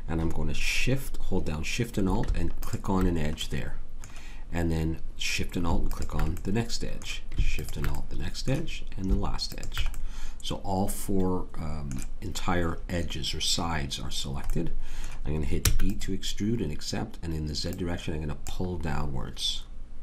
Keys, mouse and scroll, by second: 2.6-4.5 drag, 6.4-10.5 drag, 15.6 e.